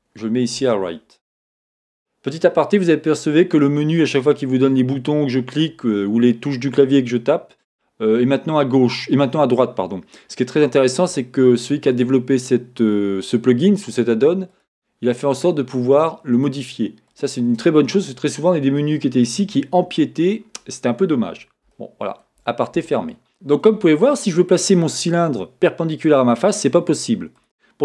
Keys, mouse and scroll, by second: 9.5-17.2 drag, 21.7-23.3 shift+middle drag, 23.3 g, 27.4 click.